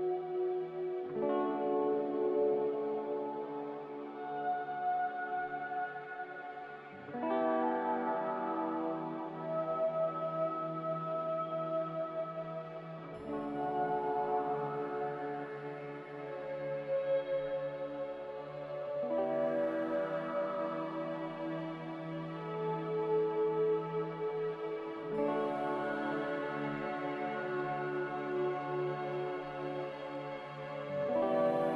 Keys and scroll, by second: 0.0-0.8 typing, 12.2 n, 19.3 x, 21.9 n.